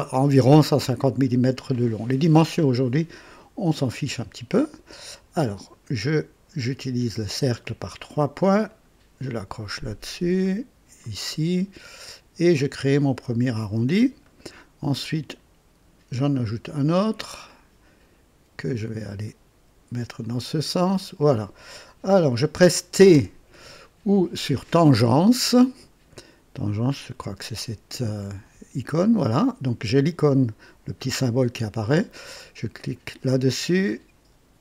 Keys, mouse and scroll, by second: 4.4 click, 5.5 click, 8.6 click, 11.0 click, 12.7 click, 14.2 right click, 16.3 click, 17.5 click, 20.2 click, 20.9 right click, 23.1 t, 32.7 click.